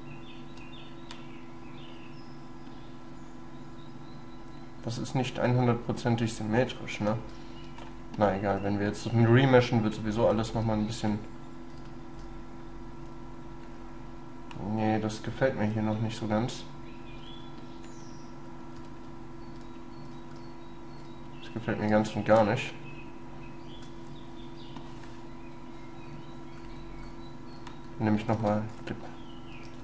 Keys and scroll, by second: 28.4 space.